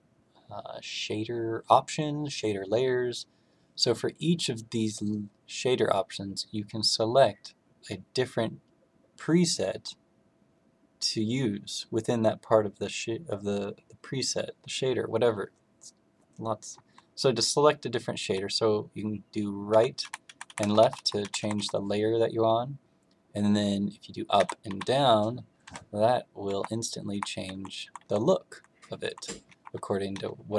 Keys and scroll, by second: 19.6 Right, 20.0 Right, 20.2 Right, 20.4 Right, 20.5 Left, 20.7 Left, 20.9 Left, 21.1 Right, 21.3 Right, 21.5 Right, 24.3 Down, 24.6 Down, 25.6 Down, 26.4 Up, 27.1 Up, 27.5 Down, 27.8 Down, 27.9 Down, 28.4 Down, 28.9 Down, 29.4 Up, 30.1 Down, 30.3 Down.